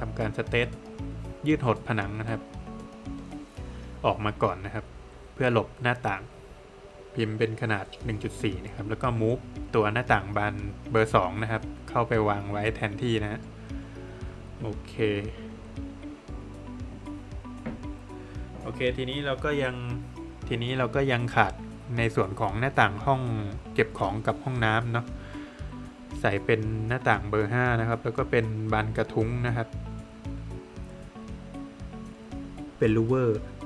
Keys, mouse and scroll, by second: 0.1 click, 2.8 space, 3.6 click, 7.3 Return, 8.2 Escape, 8.8 click, 10.8 space, 11.8 click, 13.7 click, 14.2 scroll down 1, 14.6 middle click, 14.9 scroll down 1, 18.4 middle click, 21.2 scroll up 1, 22.0 middle click, 22.3 Escape, 24.2 click, 26.1 click, 28.8 click, 31.7 click.